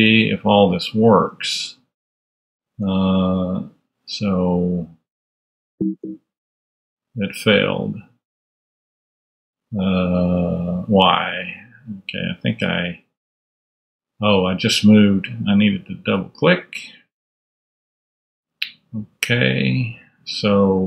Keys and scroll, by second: 2.1 super+Tab, 8.2 super+Tab, 18.0 super+Tab, 19.3 super+,.